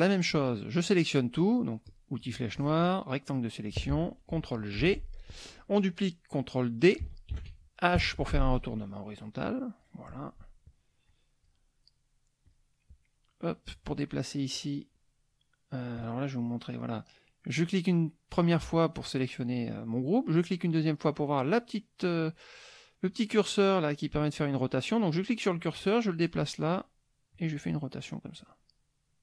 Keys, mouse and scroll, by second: 1.9 click, 2.5-3.9 drag, 4.8 ctrl+g, 7.3 ctrl+d, 7.9 h, 8.7-10.0 drag, 11.0 click, 12.5 click, 16.0 click, 16.5 click, 20.3 click, 24.0-26.5 drag, 27.3 click, 28.4-29.2 drag.